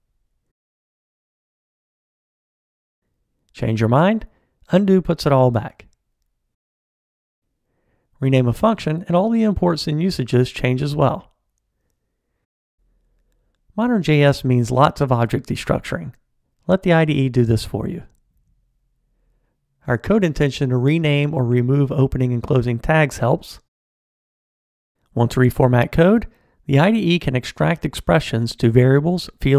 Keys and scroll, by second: 3.8 super+z, 8.3 ctrl+alt+t, 8.8 shift+F6, 13.9 alt+Return, 25.1 ctrl+alt+t, 27.9 alt+super+v.